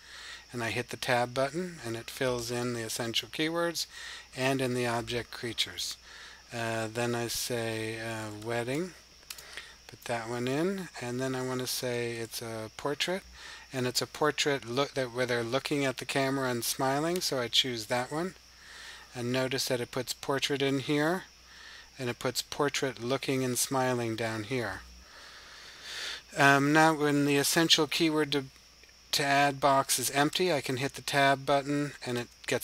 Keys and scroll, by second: 6.9-8.6 typing, 11.0-12.0 typing.